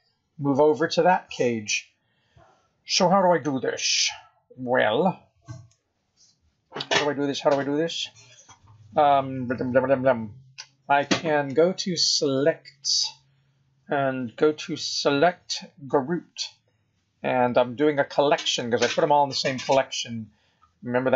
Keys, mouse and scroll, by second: 3.3 middle click, 6.3 scroll up 1, 12.8 click, 19.8 scroll up 4, 20.2-21.1 scroll down 17.